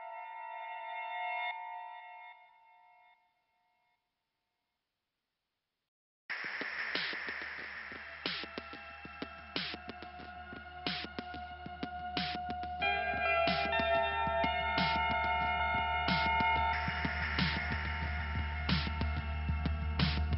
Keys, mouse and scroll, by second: 0.1-0.6 scroll up 1, 4.1 click, 5.3 click, 6.7 click, 8.0 click, 9.5 click, 10.0 click, 11.8 click, 12.3 click, 14.0 click, 14.6 click, 16.7 click, 19.3 click.